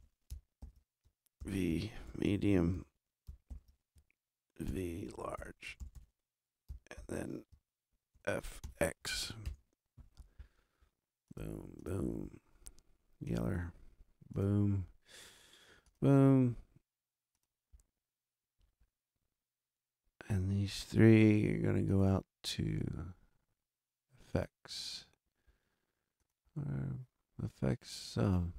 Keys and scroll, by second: 0.0-0.2 typing, 0.5 super+Down, 1.3 shift+super+v, 1.4-3.2 typing, 3.2 super+m, 3.4 super+Down, 4.6 shift+super+v, 4.8-6.4 typing, 6.6 super+e, 6.9 super+Down, 7.4 shift+super+Down, 8.1 shift+super+f, 8.6 shift+x, 9.4 shift+Return.